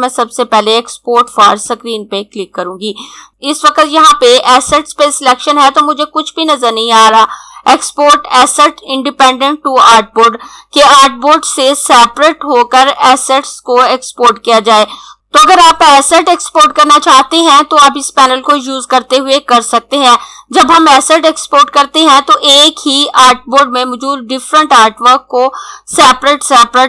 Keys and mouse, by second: 1.0 click.